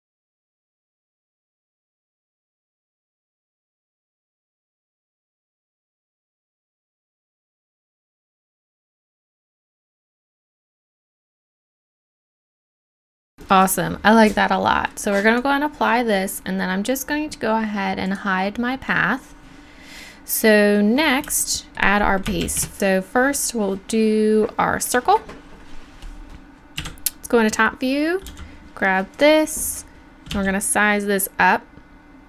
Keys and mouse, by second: 0.5 r, 0.9-1.5 drag, 1.9 Tab, 2.0 right click, 2.2-4.6 typing, 2.5 right click, 2.8 right click, 3.5 right click, 4.0 click, 4.6 Tab, 4.7-5.0 right drag, 5.1 right click, 6.0-6.4 right drag, 6.2 g, 6.7 drag, 7.2 r, 7.4 drag, 7.6 g, 8.7 g, 8.8 drag, 9.0 right click, 9.1 Tab, 9.3 right click, 9.6 g, 9.6 middle click, 10.0 click, 10.1 Tab, 10.2 right drag, 11.2-11.6 drag, 11.7 right click, 11.9 click, 12.2-12.7 middle drag, 12.7 click, 13.0 middle click, 17.0-19.1 middle drag, 21.7 Tab, 22.4 shift+a, 26.8 KP_7, 28.3 g, 30.3 s.